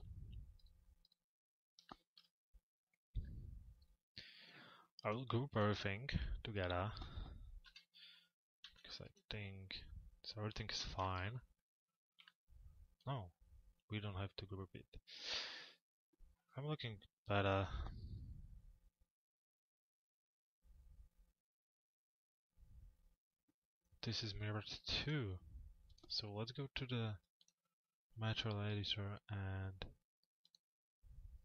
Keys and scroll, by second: 7.3 p, 8.7 f, 9.1 z, 10.4 p, 24.6 m.